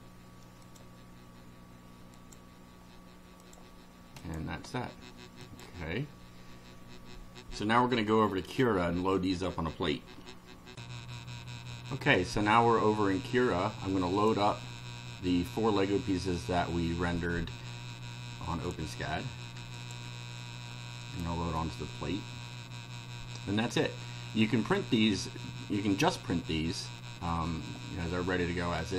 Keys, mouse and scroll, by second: 0.6 click, 2.1 click, 3.4 click, 4.2 click, 5.5 click, 10.7 ctrl+r, 14.2 click, 18.6 shift+click, 19.8 shift+click, 21.0 click, 27.0-27.6 middle drag, 27.8-28.9 drag.